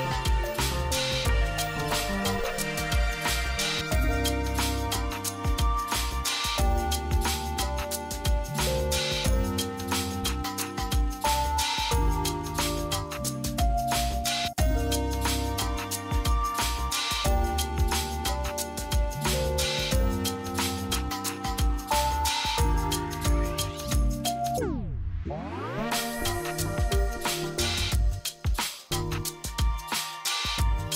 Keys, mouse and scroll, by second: 3.3 ctrl+q, 4.0 click, 7.9-11.5 drag, 12.0-25.0 drag, 25.0 ctrl+z, 25.8 ctrl+z, 26.5-30.9 drag.